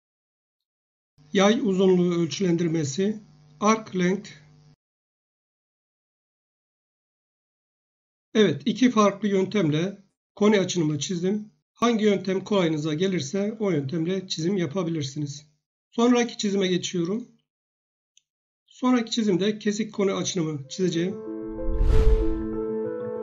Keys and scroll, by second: 10.7 Escape.